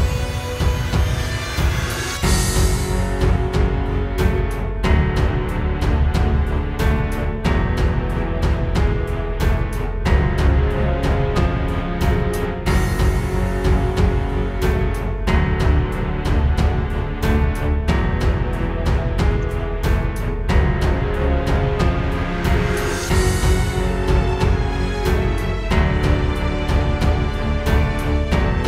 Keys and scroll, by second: 0.6 space, 1.0 space, 4.8 super+z, 6.5 space, 13.8 super+g, 14.3 space, 14.9 alt+super+space, 22.2 space, 22.5 space, 22.7 space, 27.1 space, 28.3 alt+super+space.